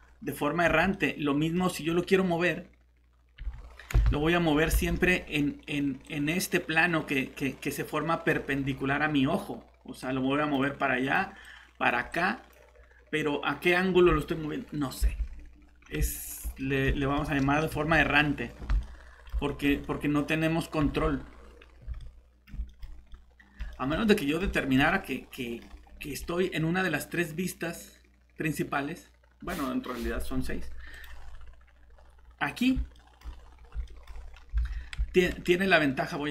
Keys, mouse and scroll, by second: 0.6 Escape, 3.4 g, 3.9 Escape, 4.8 alt+Tab, 6.0 click, 15.1 alt+Tab, 16.1 middle click, 17.7 shift+g, 18.6 Escape, 20.8 g, 21.6 scroll down 1, 21.8 Escape, 22.0 middle click, 22.8 scroll down 1, 23.1 middle click, 23.7 scroll up 1, 24.0 middle click, 24.4 scroll down 1, 24.5 middle click, 30.9 click, 31.9-32.7 scroll down 1, 32.9 middle click, 33.4 scroll up 1, 33.8 middle click, 34.6 alt+shift+Tab, 34.8 scroll down 1.